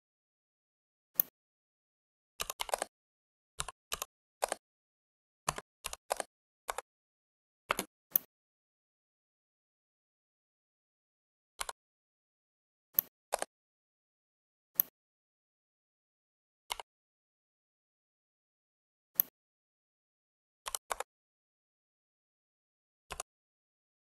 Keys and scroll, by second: 2.3-4.2 typing, 5.3-5.9 typing, 6.5 Return, 7.5 space, 20.6 6, 20.8 Return.